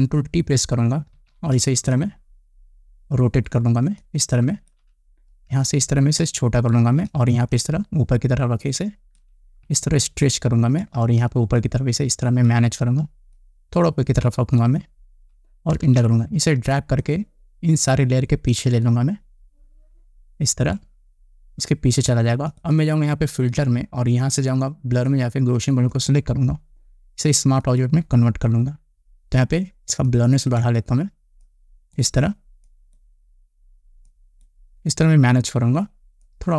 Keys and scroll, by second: 1.8 ctrl+t, 16.5 Return.